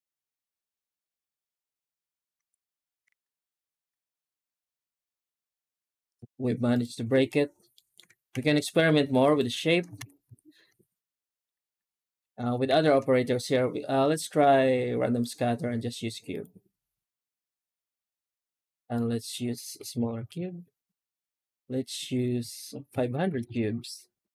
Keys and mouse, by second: 2.3 alt+h, 3.1 alt+shift+z, 6.1 z, 7.6 middle click, 8.3 ctrl+s, 9.1 right click, 9.4 Tab, 9.8 alt+shift+z, 10.1 a, 10.6 Tab, 11.2 middle click, 11.5 alt+shift+z, 12.0 shift+middle drag, 12.5 shift+q, 23.1 KP_0.